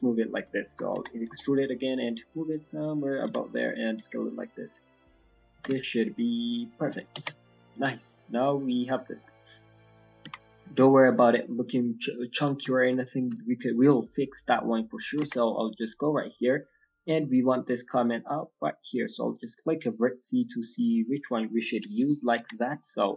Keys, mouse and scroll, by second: 0.9 e, 3.2 s, 6.9-7.3 scroll down 5, 7.0 g, 7.1 Tab, 7.3 middle click, 7.7-8.1 scroll down 1, 8.4 right click, 9.1 middle click, 9.4-10.0 scroll down 2, 9.7 middle click, 10.2 KP_1, 10.5 scroll up 5, 10.9 shift+middle click, 12.7 shift+middle click, 12.9 scroll up 1, 13.3 shift+middle click, 13.9-14.3 scroll up 2, 14.3 scroll down 1, 14.3-14.6 scroll down 3, 14.6 shift+middle click, 15.8 scroll down 1, 16.2 scroll up 2, 16.2 scroll down 3, 19.2 click, 19.5 middle click, 21.3-22.0 scroll down 2, 21.8 KP_1, 22.0 KP_3, 22.3 KP_1, 22.6 scroll up 3.